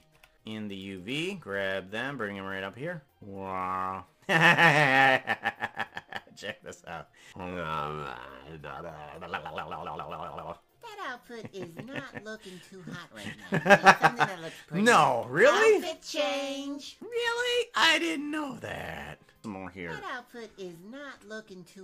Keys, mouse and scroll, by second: 19.5 space.